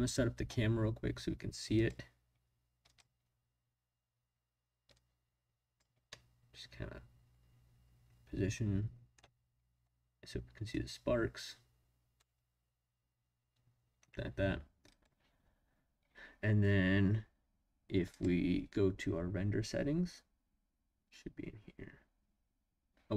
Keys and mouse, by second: 1.7 click, 2.8 click, 5.0 click, 6.1-9.1 middle drag, 10.7-12.1 drag, 14.9 click, 18.1 click.